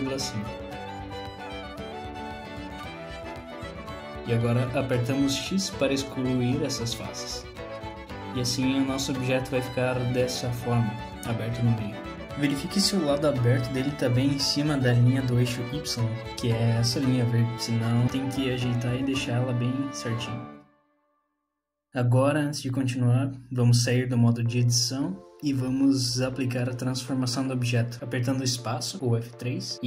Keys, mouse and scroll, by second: 3.2 middle click, 3.2-3.5 scroll down 2, 6.0 x, 8.0 middle click, 9.2 alt+z, 9.7 middle click, 16.5-17.0 scroll down 3, 16.9 middle click, 18.0 Tab, 21.0 click, 24.9 space, 28.4 p.